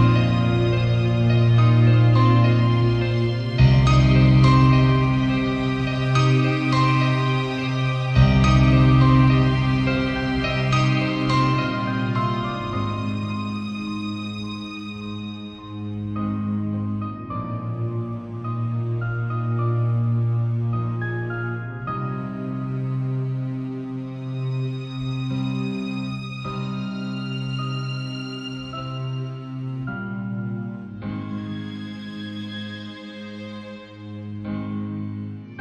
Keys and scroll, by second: 15.7 i, 22.6 b, 23.4 ].